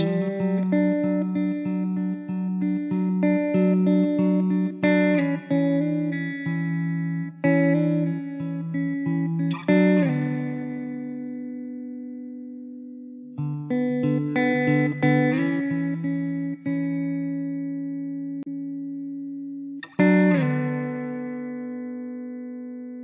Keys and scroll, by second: 0.6 g, 1.3 Tab, 2.1 Tab, 3.4 o, 4.0 g, 4.9 ctrl+z, 5.4 o, 5.7 g, 7.7 g, 8.8 g, 10.8 Tab, 11.4 `, 15.9 r, 18.8 s, 21.0 shift+d.